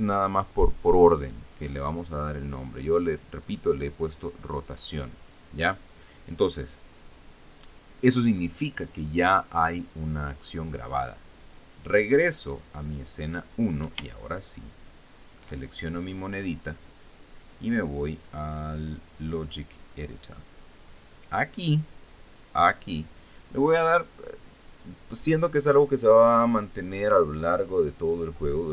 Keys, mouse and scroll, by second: 12.0 click, 13.3 click, 14.7-16.2 shift+middle drag, 18.1 click, 20.7 click, 23.2-24.3 drag.